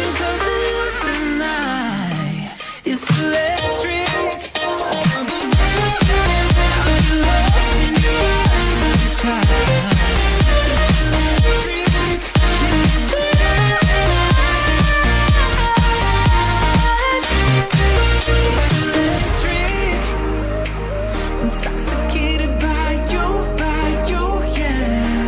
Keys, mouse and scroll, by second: 0.0 click, 10.5 click, 19.3-20.3 scroll up 1, 20.3 click, 23.5-24.0 typing.